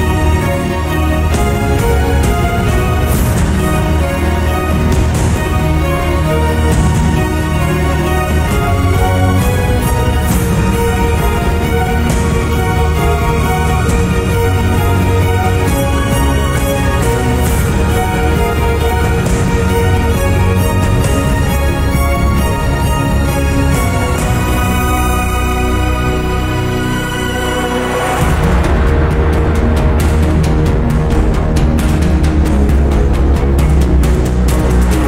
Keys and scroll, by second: 16.0 t, 23.4 t, 33.2-34.4 typing.